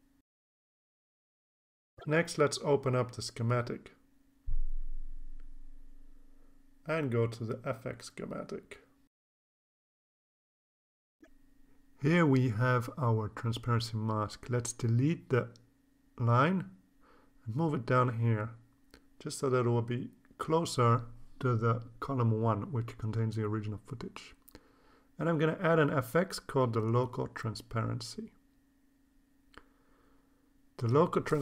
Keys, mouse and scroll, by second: 2.1 click, 3.1 click, 5.2 click, 7.7 click, 10.0-11.0 drag, 12.6-13.9 drag, 14.2-14.8 drag, 15.6 click, 16.9 Delete, 17.9-19.4 drag, 21.1-23.1 drag, 24.7 click, 25.3 right click, 29.8 click.